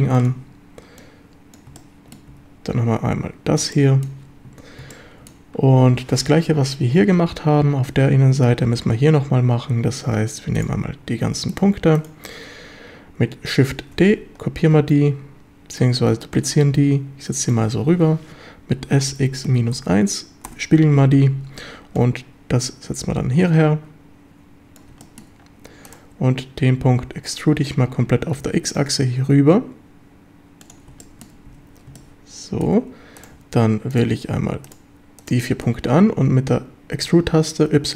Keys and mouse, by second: 0.2 click, 1.0 click, 1.8 shift+middle click, 2.3 a, 3.8-4.1 shift+drag, 4.9-5.3 shift+drag, 11.5-12.3 ctrl+drag, 13.8 shift+d, 14.8 Escape, 16.4-17.5 drag, 19.1 x, 19.5 KP_Subtract, 19.8 KP_1, 20.5 Return, 22.0-24.8 drag, 25.1 shift+middle click, 28.4 x, 30.7 click, 31.1 shift+middle drag, 32.0-32.7 shift+drag, 33.2-34.5 drag, 35.5 shift+drag, 37.1 e, 37.8 y.